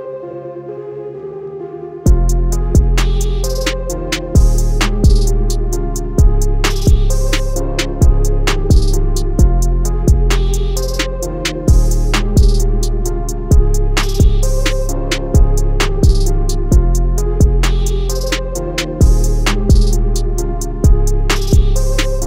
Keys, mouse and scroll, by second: 0.4 shift+click, 3.3 click, 7.1 Escape, 8.5 click, 16.1 click, 20.4 click.